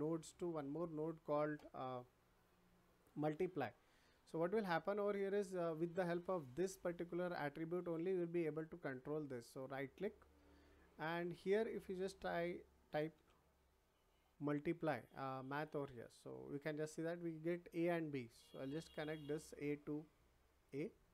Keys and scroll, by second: 13.0 m.